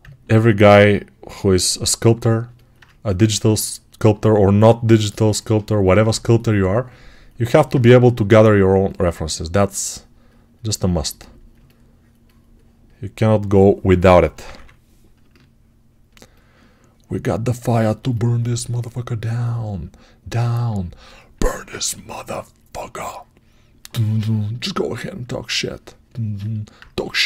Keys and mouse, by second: 7.7 1, 14.0 [, 14.2 [, 26.2-27.2 drag.